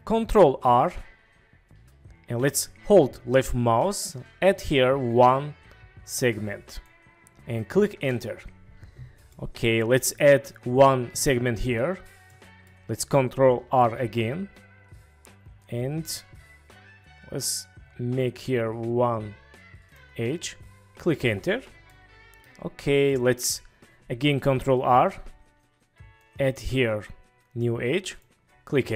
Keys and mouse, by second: 0.7 ctrl+r, 8.0 Return, 9.3-10.2 middle drag, 12.3 middle click, 13.8 ctrl+r, 21.2 Return, 21.9-22.4 middle drag, 23.1 middle click, 24.9 ctrl+r, 28.8 Return.